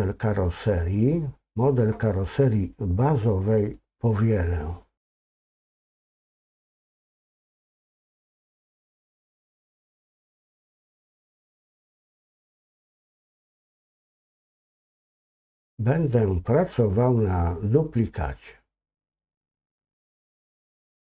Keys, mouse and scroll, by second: 0.7 click, 7.8-11.8 drag, 19.0 click, 19.9 click.